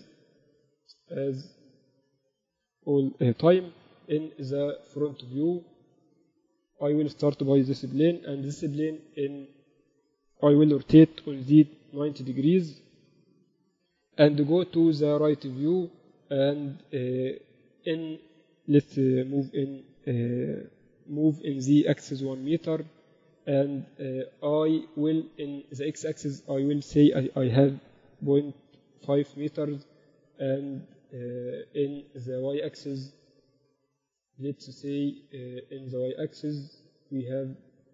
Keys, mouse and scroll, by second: 0.8 shift+a, 7.8 n, 10.2 Escape, 10.8 r, 14.0 KP_3, 17.6-18.8 middle drag, 18.8 g, 24.4-27.0 middle drag, 25.4-27.3 drag, 32.4-34.3 drag, 32.4 middle click.